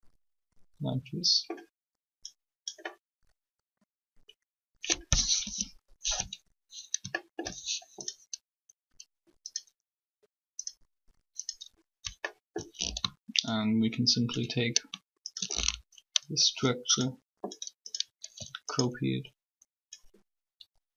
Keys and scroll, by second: 5.4 3, 18.2 shift+d.